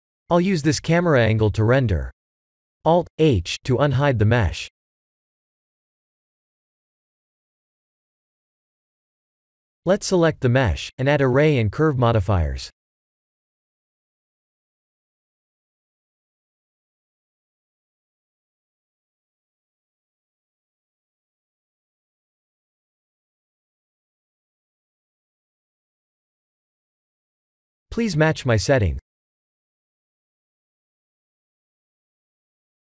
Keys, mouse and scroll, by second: 0.0-0.7 typing, 1.5 click, 3.4 click, 4.8-5.6 scroll down 5, 5.6-6.4 middle drag, 6.5 scroll down 2, 10.2 click, 13.0-15.2 drag, 18.4 click, 19.9 ctrl+z, 20.5 click, 22.5 click, 23.4-24.6 drag, 25.5-27.0 drag, 27.9-29.3 drag, 30.1 click.